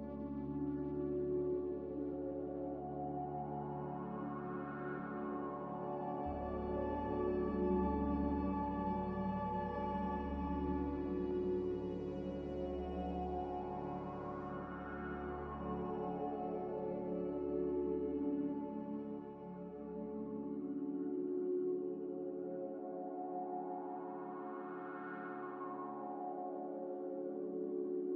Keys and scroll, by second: 2.4 z, 6.1 z, 8.5 Escape, 9.8-11.7 typing, 18.2 5, 18.6 Return, 20.4 5, 20.6 Return, 27.5-28.1 typing.